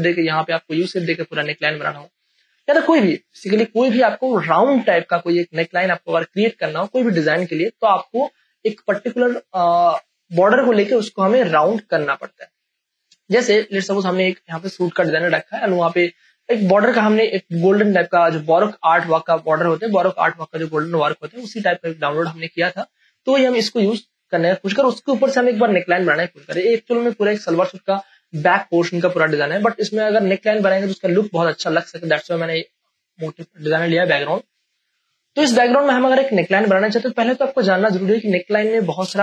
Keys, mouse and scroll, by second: 1.6 Right, 6.7 click, 6.9 click, 13.2 click, 14.6 space, 14.9 ctrl+click, 16.4 click, 16.8 v, 17.2 click, 17.2-19.0 drag, 19.0 space, 19.3-26.6 ctrl+drag, 26.6 space, 26.9-35.6 ctrl+drag, 35.6 ctrl+space, 35.9 ctrl+click, 36.1 ctrl+space, 37.1 ctrl+space, 37.8 click, 38.2 space, 38.6 click.